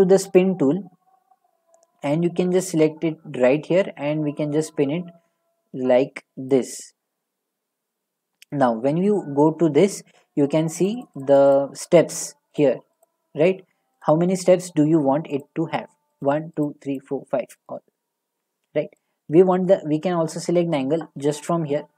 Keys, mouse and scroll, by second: 0.4-3.4 drag, 6.5-8.1 drag, 8.5-11.2 drag, 12.5-15.6 drag, 16.3 click, 16.7 click, 17.1 click, 17.7 click, 18.6-20.8 drag.